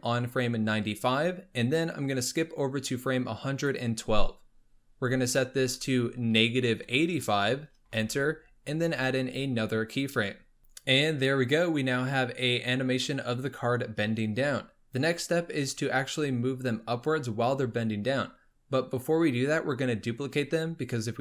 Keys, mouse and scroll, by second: 2.1-5.1 drag, 5.2-8.4 drag, 9.5 click, 10.6-12.8 drag, 15.9-17.6 scroll down 3.